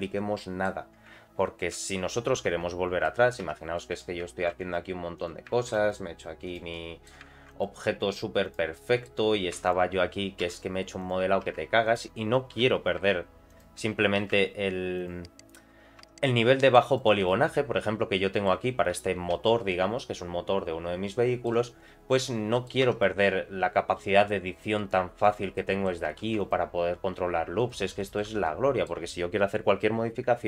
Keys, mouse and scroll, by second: 0.0 middle click, 1.7 ctrl+1, 2.1 ctrl+2, 2.4 ctrl+3, 3.0 middle click, 3.4 Tab, 3.7 middle click, 4.4 ctrl+r, 5.6 ctrl+r, 6.7 middle click, 7.3 ctrl+r, 8.7 middle click, 9.5 3, 9.6 click, 10.4 i, 11.4 e, 12.5 i, 16.2 middle click, 17.0 right click, 17.5 middle click, 18.9 ctrl+3, 19.3 ctrl+4, 19.7-21.4 middle drag, 22.5 middle click, 22.8 Tab, 23.0 middle click, 23.5-24.0 scroll up 1, 24.0 s, 25.5 middle click, 26.2 ctrl+r, 28.0 middle click, 28.3 Tab, 28.4 middle click.